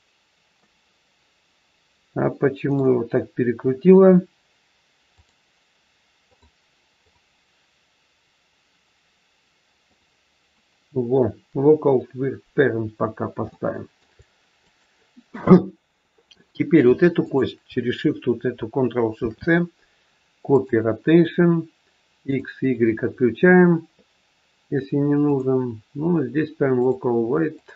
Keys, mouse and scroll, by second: 0.6 middle click, 5.1 click, 7.0 click, 12.9-13.2 scroll up 2, 13.5 shift+middle click, 14.5 click, 17.1 shift+click, 19.1 ctrl+shift+c, 22.1 click, 22.6 click.